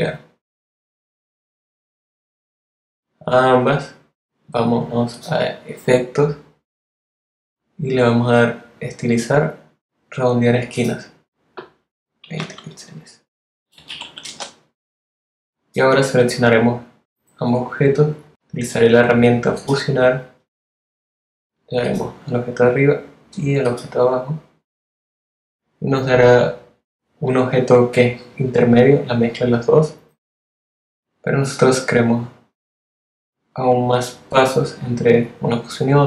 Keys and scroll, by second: 11.2-13.7 typing.